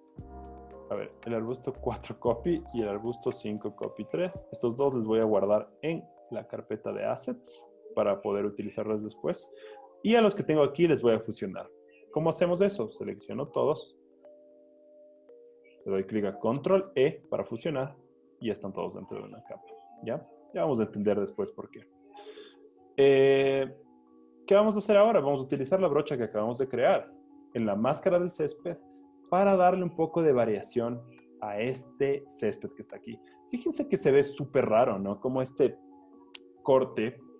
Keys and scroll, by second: 2.8 super+j, 16.6 super+e, 19.2 z, 20.3 z.